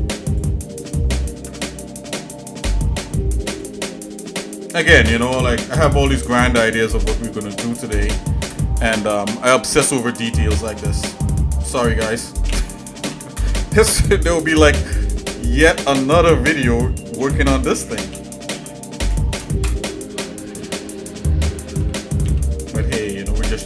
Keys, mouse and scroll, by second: 1.3 ctrl+Tab, 3.5 click, 5.0 s, 12.5 s, 15.3 middle click, 15.3-16.4 scroll up 3, 16.7 click, 18.1 s, 21.9 g.